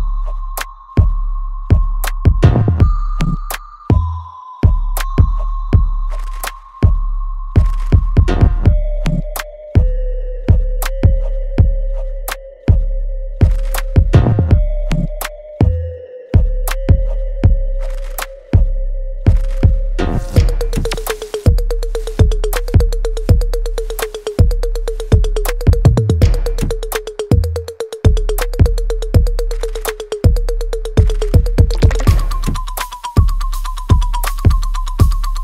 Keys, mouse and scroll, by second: 5.4 right click, 6.4 click, 8.2 click, 12.2 shift+click, 15.2 click, 20.7 click, 23.9-25.7 ctrl+drag, 25.7 alt+middle click, 26.1-27.6 alt+right drag, 27.6 click, 27.6-30.0 ctrl+drag, 30.0-33.5 ctrl+drag.